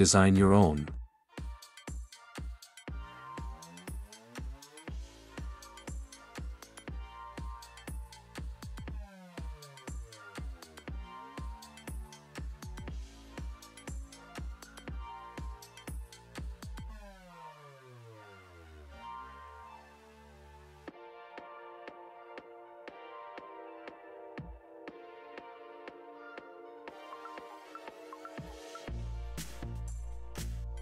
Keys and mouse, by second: 0.1 e, 0.8 r, 1.3 s, 2.1 click, 2.7 g, 4.0 shift+z, 5.3 g, 6.3 click, 6.6 shift+z, 10.1 g, 11.2-11.6 drag, 11.6 e, 13.5-14.1 drag, 14.3 click, 14.7 click, 15.5-18.4 typing, 16.6 click, 18.3 click, 19.4 1, 19.7 shift+drag, 19.9 click, 20.0 click, 20.3 m, 20.9-21.2 drag, 21.2 g, 22.5 drag, 22.6 shift+click, 22.8 2, 23.2 s, 24.2 Tab, 24.6 s, 25.1 click, 25.4 Tab, 25.6 Tab, 25.8 click, 26.0 Tab, 27.1 s, 28.4 shift+click, 28.7 s, 29.8 g, 30.7 middle click.